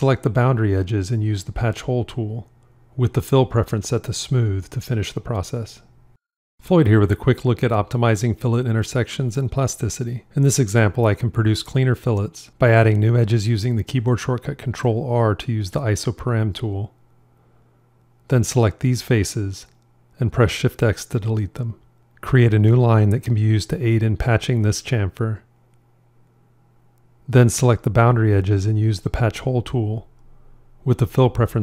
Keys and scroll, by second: 11.4 ctrl+r, 20.7 shift+x.